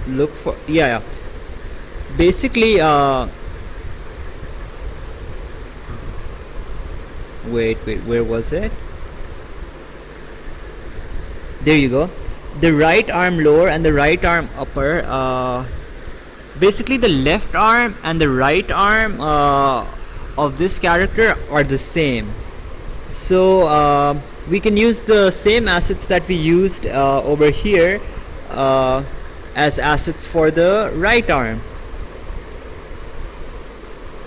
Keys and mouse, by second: 33.8 click.